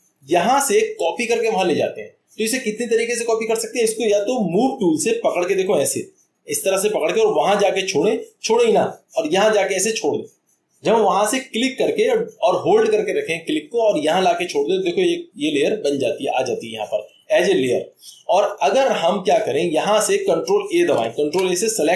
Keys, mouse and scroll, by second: 9.8-10.9 drag, 15.9-17.1 drag, 19.3 click, 20.9 click, 21.2 ctrl+a.